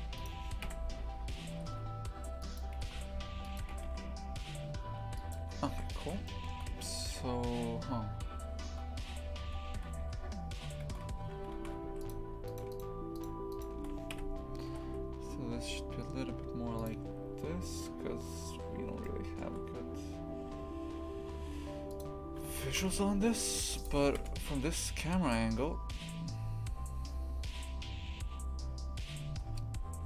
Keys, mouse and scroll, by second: 0.1 right click, 0.6 KP_3, 1.5 g, 2.8 g, 5.4 Tab, 6.2-9.4 shift+middle drag, 9.4 Tab, 10.0 3, 10.8 shift+f, 12.4 shift+right click, 13.1 shift+right click, 13.5 shift+right click, 14.1 KP_3, 14.7 g, 22.0 click, 22.3 Tab, 22.6 shift+f, 24.1 KP_0, 26.3 Tab, 29.3 g.